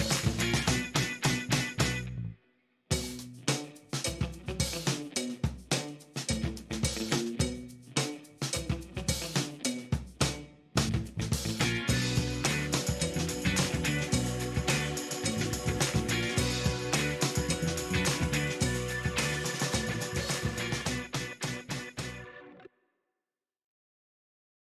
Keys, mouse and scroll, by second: 0.3 shift+middle click, 2.0 click, 3.2 click, 4.0 shift+right click, 5.5 scroll up 2, 6.2 shift+right click, 6.9 shift+right click, 8.4 shift+right click, 9.3 shift+middle click, 10.0 shift+right click, 11.8 shift+right click, 12.8 shift+right click, 14.2 shift+right click, 16.9 shift+middle click, 23.0 click.